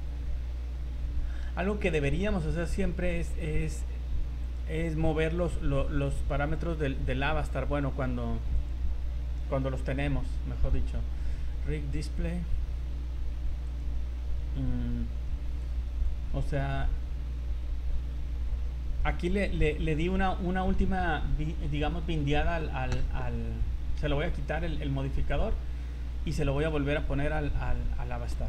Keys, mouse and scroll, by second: 0.7 middle click, 1.3 middle click, 2.0 middle click, 3.1 right click, 4.4 click, 5.7 click, 7.2-7.6 scroll up 5, 8.5 click, 12.0 click, 12.8-13.6 scroll up 5, 13.7 click, 15.6 click, 16.3 scroll up 2, 17.9-18.9 scroll down 12, 18.9-19.4 scroll up 5, 21.6 click, 25.3 click, 26.6 shift+right click, 27.4-28.3 scroll down 12.